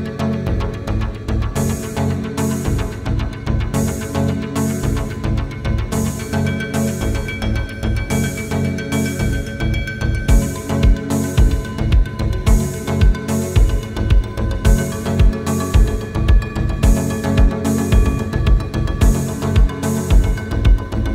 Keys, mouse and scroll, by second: 2.0-2.3 scroll down 1, 2.4 q, 2.8 scroll down 1, 3.9 q, 6.5 scroll up 1, 7.3-7.8 scroll down 1, 9.6-10.1 typing, 9.8 Return, 10.3 Return, 11.1 scroll down 1, 11.5 middle click, 11.8 scroll down 1, 12.0 scroll up 1, 12.2 scroll down 1, 12.6 middle click, 13.1 scroll up 1, 14.0 typing, 14.2-15.2 scroll down 1, 15.2 q, 16.5 scroll up 1, 16.8 scroll down 1, 19.6 typing, 19.8 Return, 21.0 scroll down 1.